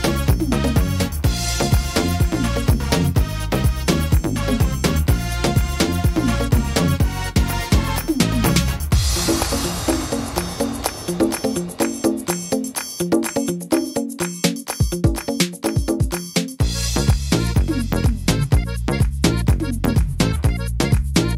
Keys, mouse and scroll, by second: 2.4 middle click, 3.6 s, 5.0 middle click, 5.6 scroll up 2, 5.9 middle click, 6.2-7.3 scroll down 2, 6.6 middle click, 7.4 middle click, 8.0 right click, 8.4 shift+right click, 8.8 middle click, 9.9 shift+right click, 10.3 shift+right click, 10.7 middle click, 11.9 s, 15.4 ctrl+r, 18.3 s, 19.8 middle click, 20.2-21.3 scroll down 2, 20.6 middle click.